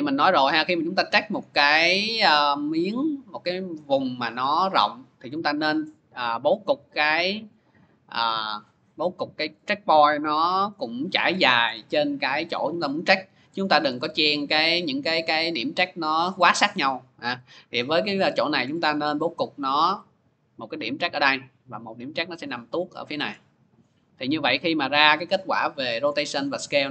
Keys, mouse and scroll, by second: 1.2 middle click, 2.1 click, 3.7 click, 5.1 click, 7.3 click, 9.3 click, 9.7 scroll, 10.6-11.2 scroll, 11.5-12.0 scroll, 13.8 scroll, 14.6 middle click, 14.6 scroll down 3, 16.6 middle click, 17.6 middle click, 18.2-18.9 scroll, 20.6 click, 21.2-22.1 scroll, 22.3 middle click, 22.5 click, 23.2 middle click, 23.4 middle click, 25.9 click, 26.3-26.9 scroll, 26.6 click.